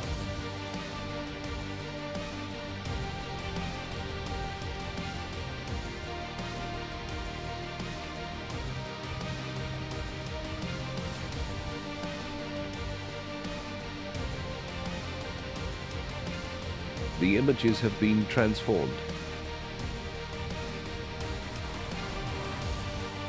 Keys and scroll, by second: 0.2 Delete, 0.9-3.1 typing, 3.5 Tab.